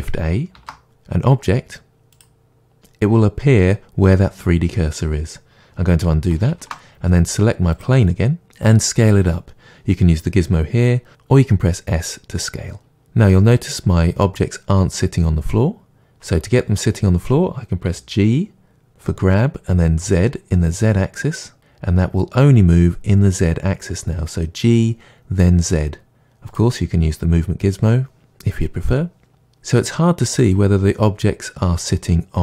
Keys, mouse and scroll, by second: 0.5 shift+a, 6.4 ctrl+z, 7.7-9.7 drag, 11.1 s, 12.9 click, 13.3-26.5 middle drag, 17.8 g, 26.5 click, 29.3-32.4 middle drag.